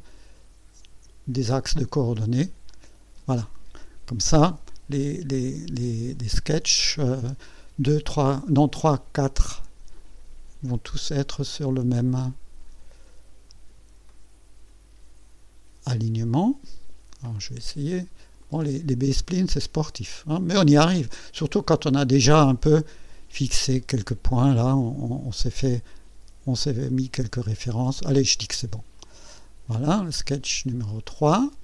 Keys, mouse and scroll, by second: 2.7 click, 7.2-8.7 drag, 9.9-13.9 drag, 14.1-14.8 right drag, 16.3 click, 18.4-20.4 drag, 20.6-21.4 right drag, 23.5-24.2 scroll up 1, 24.2-25.6 right drag, 29.0 click, 29.8 scroll down 1, 31.4 click.